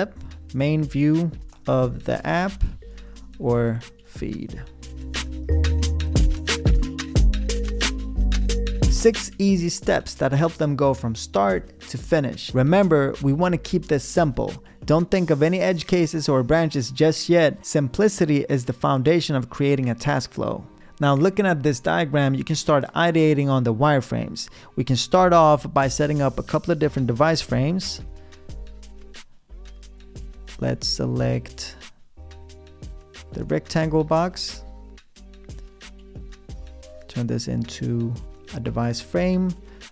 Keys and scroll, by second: 0.8-3.9 typing, 27.6 f, 29.7 a, 30.1 r.